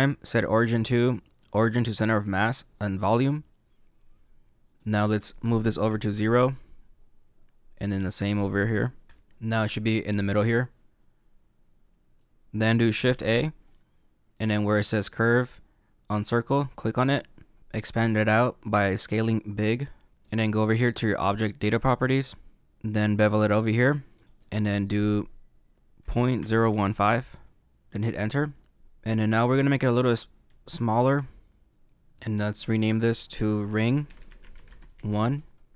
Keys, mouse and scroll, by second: 4.7 click, 8.0 click, 9.3 shift+middle click, 12.4 scroll down 1, 13.0 shift+a, 17.7 s, 20.1 middle click, 21.7 click, 24.1 click, 28.4 middle click, 30.0 s, 32.9 click, 33.0 click.